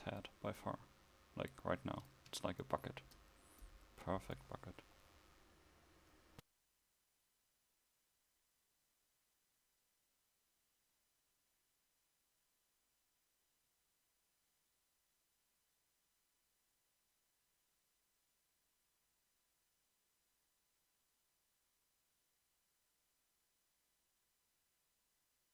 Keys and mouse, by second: 2.4 a, 7.8 Tab, 9.4 KP_1, 10.3 s, 24.2 Tab.